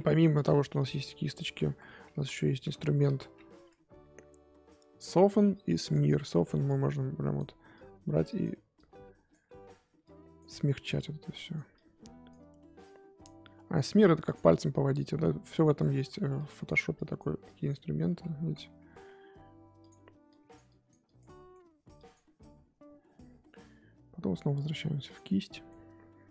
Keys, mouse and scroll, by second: 0.3-1.6 drag, 1.6 ctrl+z, 2.1 ctrl+z, 2.8 ctrl+z, 5.9-9.4 drag, 9.4 middle click, 10.0 click, 10.5 middle click, 10.9-16.0 drag, 16.0 ctrl+z, 16.3-18.1 drag, 18.1 ctrl+z, 18.4 ctrl+z, 18.8 ctrl+z, 19.8-21.2 drag, 21.2 middle click, 21.9-25.5 drag, 25.5 middle click, 25.9-26.3 scroll up 1.